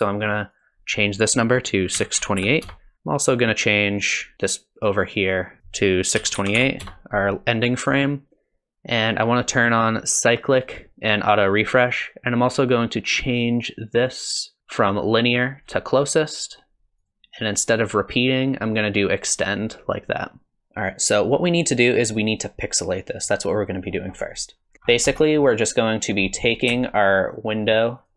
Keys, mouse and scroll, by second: 0.5 click, 5.6 click, 5.6-7.6 scroll down 5, 10.5 click, 11.4 click, 14.6 click, 17.0 click, 20.6 shift+Left, 24.1 middle click, 24.2 click, 24.7 click, 24.7 scroll down 5, 24.9 scroll up 8, 25.1 middle click, 26.3 middle click, 27.0 ctrl+shift+click, 27.3 ctrl+shift+click, 27.6 ctrl+shift+click, 27.7 ctrl+shift+click, 28.0 ctrl+shift+click.